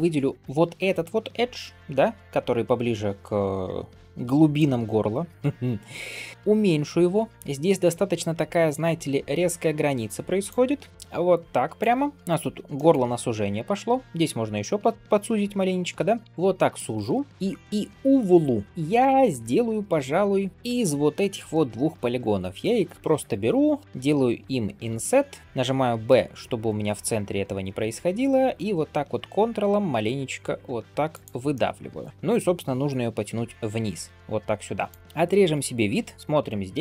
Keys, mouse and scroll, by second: 2.1 scroll down 2, 3.8 scroll up 2, 4.2 shift+middle click, 5.3 ., 12.3 scroll down 1, 12.6 shift+middle click, 13.4 alt+click, 14.0 s, 15.2 g, 16.2 alt+click, 17.0 shift+middle click, 17.3 scroll up 1, 17.6 scroll down 1, 18.1 3, 18.6 middle click, 18.9 click, 19.3-20.5 middle drag, 20.5 shift+click, 20.8 scroll up 2, 21.4 shift+middle click, 21.8-23.1 middle drag, 31.4 middle click, 33.2 g, 35.0 middle click, 35.0 scroll down 1, 35.2 alt+b, 36.1 shift+middle click, 36.1-36.5 scroll up 1.